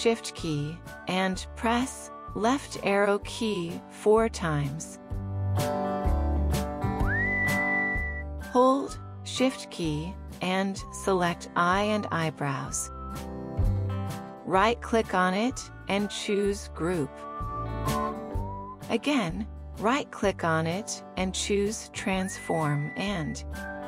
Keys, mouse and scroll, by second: 3.2 shift+click, 3.8 shift+click, 4.3 shift+Left, 4.9 shift+Left, 6.1 ctrl+1, 12.7 shift+click, 15.5 right click, 20.1 right click.